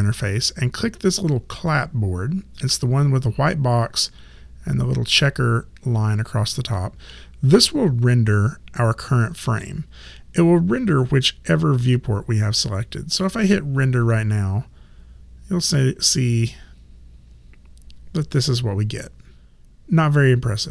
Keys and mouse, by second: 12.8 click.